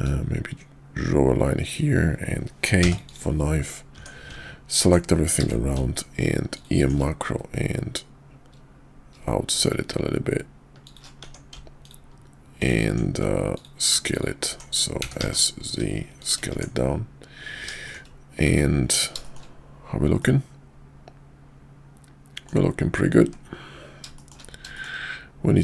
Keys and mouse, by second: 0.0-3.5 drag, 3.9 Tab, 5.4 q, 11.2 Tab, 11.8 click, 12.5 click, 13.5 alt+click, 14.1 click, 15.0 s, 16.5 Tab, 17.8 shift+middle click, 18.4 `, 19.2 shift+middle click, 20.2-22.5 middle drag, 24.1 middle click, 24.7 middle click.